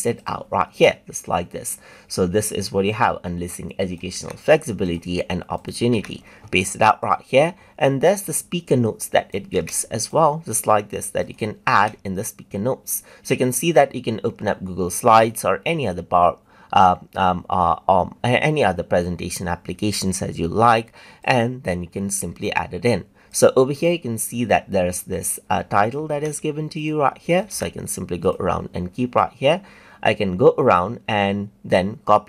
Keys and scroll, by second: 4.1 ctrl+c, 5.9 ctrl+v, 9.5 ctrl+c, 11.7 ctrl+v, 26.1 ctrl+c, 27.5 ctrl+v.